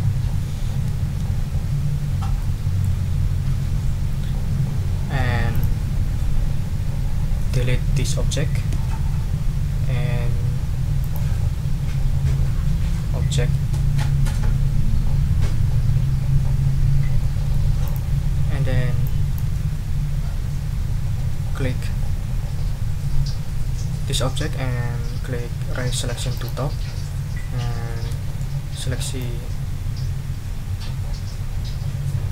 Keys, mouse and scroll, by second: 2.4 click, 3.9 ctrl+scroll up 2, 5.5 click, 8.7 Delete, 11.0 click, 15.9 Delete, 17.2 click, 17.8 click, 19.0 click, 19.5 ctrl+z, 26.3 click, 28.2 ctrl+shift+scroll down 2, 29.2-32.3 drag.